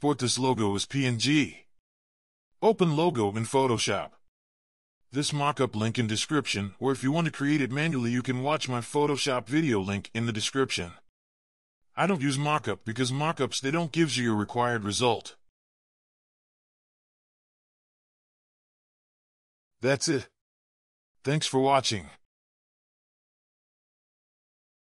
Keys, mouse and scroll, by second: 2.1 ctrl+9, 5.1 alt+scroll up 1, 5.8-6.2 scroll down 2, 6.4 right click, 6.4 ctrl+click, 7.0 ctrl+v, 7.2 right click, 7.3 double click, 7.4 right click, 7.7 scroll down 1, 8.4 double click, 9.1 scroll down 1, 9.3 shift+click, 9.5 ctrl+scroll up 1, 9.9 typing, 10.3 ctrl+click, 11.1 ctrl+click, 11.7 double click, 12.6 double click, 12.8 ctrl+click, 13.4 alt+scroll up 1, 13.5 ctrl+t, 13.8 double click, 14.7-15.2 typing, 15.6 right click, 16.2 double click, 16.5 right click, 16.8 ctrl+z, 16.8 right click, 17.3 scroll up 1, 17.5-19.6 typing, 17.8 ctrl+d, 18.1 ctrl+v, 18.8 ctrl+j, 18.8 Return, 19.0 scroll down 1.